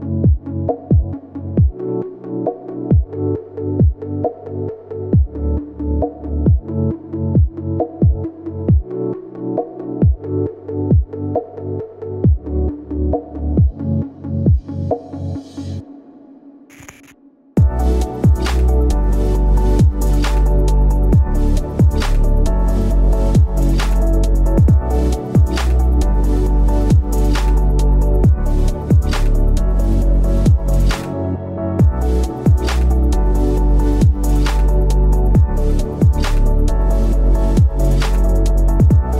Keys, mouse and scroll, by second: 16.2 right click.